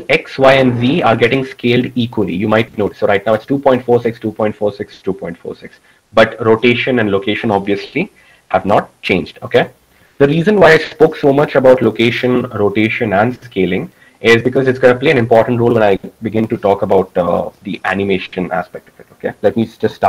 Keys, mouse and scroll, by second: 9.5 ctrl+z.